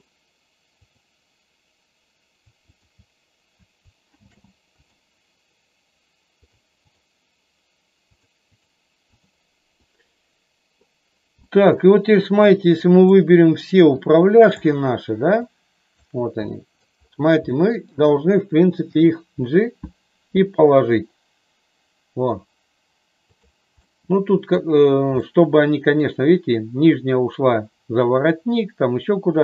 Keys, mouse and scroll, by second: 0.8-2.1 drag, 2.5-4.0 shift+drag, 4.1 ctrl+shift+c, 6.3 click, 6.8 click, 8.2 click, 9.8 middle click, 11.4 middle click, 12.3 click, 13.9 shift+click, 15.4 shift+click, 16.4 middle click, 17.4 middle click, 18.8 g, 23.8 middle click, 25.2 middle click.